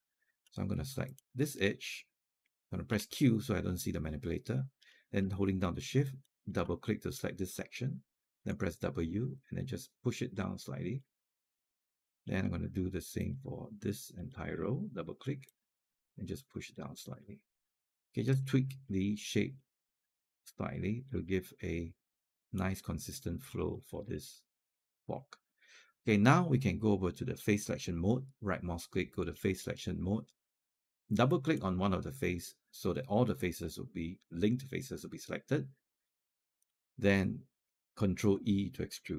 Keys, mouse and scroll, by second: 0.9 click, 2.7 q, 5.9 shift+click, 6.2 shift+click, 8.2 w, 9.2 click, 10.3 alt+click, 11.4 click, 13.0-16.9 drag, 17.0 alt+click, 18.2 scroll up 1, 18.7 alt+click, 19.4 click, 20.7 click, 21.1 alt+click, 23.3 scroll down 1, 23.5 alt+click, 24.0 alt+middle click, 24.4 alt+click, 24.8 scroll down 1, 25.0 alt+click, 28.1-30.7 right drag, 31.1 click, 33.4-36.4 alt+drag, 38.8 ctrl+e.